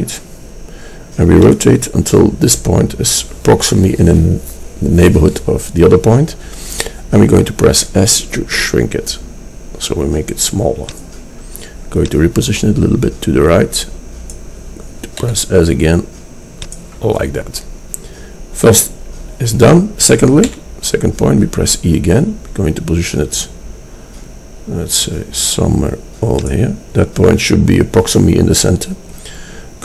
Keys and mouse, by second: 7.8 s, 12.3-14.4 middle drag, 15.2 s, 20.6 e.